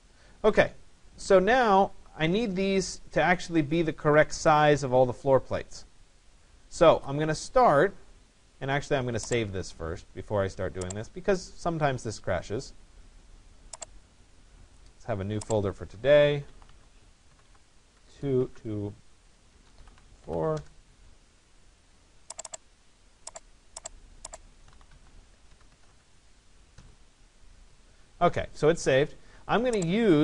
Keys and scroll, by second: 16.9 1, 18.0 BackSpace, 20.6 Return, 25.1 2, 25.7 1, 26.0 4.